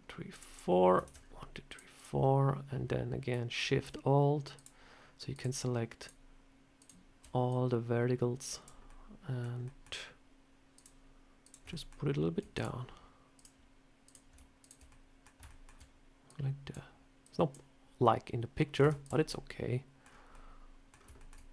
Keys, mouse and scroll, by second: 0.9 ctrl+r, 4.4 alt+shift+click, 7.4 alt+shift+click, 8.7 scroll up 1, 8.7 middle click, 9.5 middle click, 10.6 click, 11.3 click, 11.6 shift+middle click, 11.6 shift+middle click, 12.4 click, 13.2 click, 13.9 click, 14.5 shift+click, 14.5 shift+click, 14.7 middle click, 15.3 shift+middle click, 16.1 click, 17.1 click, 17.2 shift+click, 18.7 Tab, 18.9 click, 19.2 middle click, 19.9 scroll down 3, 20.2 middle click, 20.8 scroll down 3, 21.0 shift+middle click, 21.4 middle click.